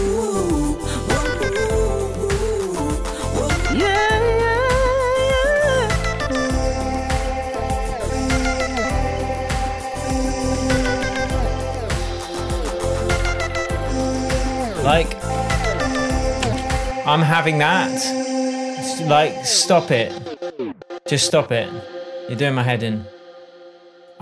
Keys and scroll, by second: 16.8 space.